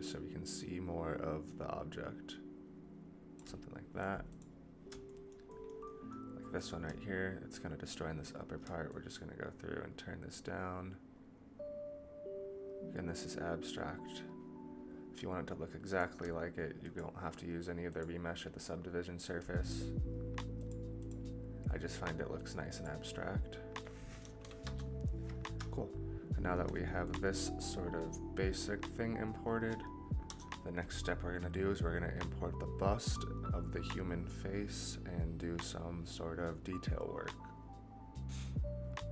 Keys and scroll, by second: 30.2 KP_0.